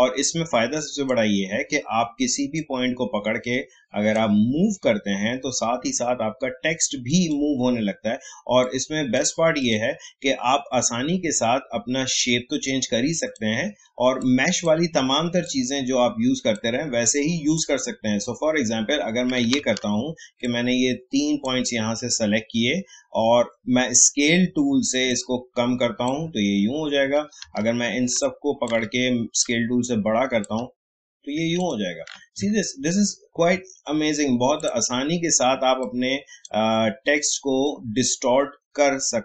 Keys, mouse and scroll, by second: 7.1 click, 13.2-19.0 drag, 19.3 click, 19.5 ctrl+z, 20.4-31.5 drag, 32.5 alt+scroll down 1, 33.1 alt+scroll up 1, 34.5 click, 34.6-39.2 drag.